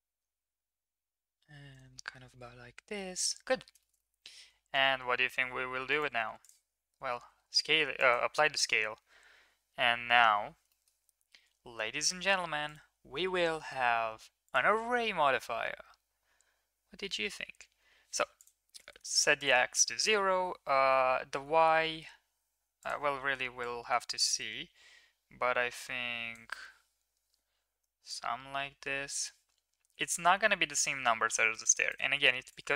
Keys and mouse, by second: 0.1 g, 2.0 middle click, 4.3 ctrl+s, 5.9 click, 7.2 ctrl+a, 9.7 KP_Decimal, 10.6 shift+middle drag, 12.6-14.5 drag, 18.3 click, 19.5-22.8 drag, 23.6-26.4 drag, 28.0-31.9 shift+drag, 32.5-32.7 shift+drag.